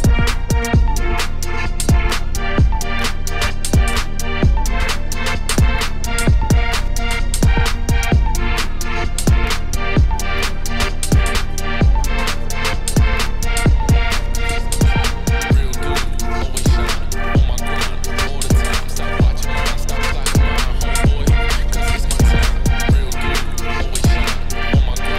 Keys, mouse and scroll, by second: 0.3-4.9 drag, 6.5-9.9 middle drag, 9.9 click, 10.3 scroll, 12.0 click, 14.9 click, 15.7 ctrl+v, 17.2 click, 17.4 middle click, 17.9 click, 23.0 ctrl+shift+click, 23.7 middle click, 24.0 scroll up 4, 24.3 scroll down 2.